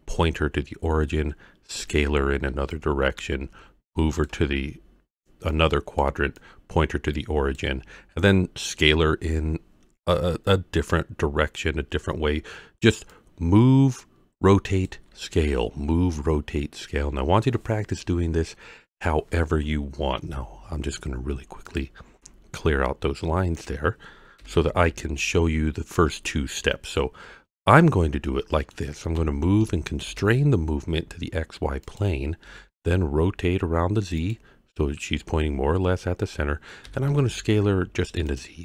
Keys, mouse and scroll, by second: 1.8 d, 2.5 d, 2.7-4.2 drag, 4.2-6.4 typing, 5.5-6.0 drag, 6.4-7.6 drag, 7.5 d, 7.7 d, 7.8 d, 8.0 d, 12.6 d, 13.1-14.9 drag, 14.8 d, 15.6 d, 20.2 n, 21.6 click, 23.5 click, 24.4 n, 28.0 scroll down 1, 28.2-28.7 middle drag, 29.1 g, 30.0 shift+z, 31.8 click, 32.4 r, 32.7 z, 34.2 click, 36.8 s, 37.1 z, 38.3 click.